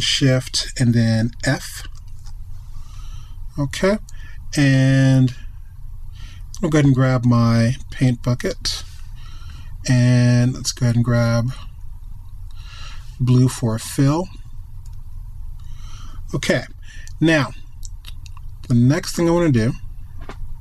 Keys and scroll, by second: 1.9 alt+shift+f.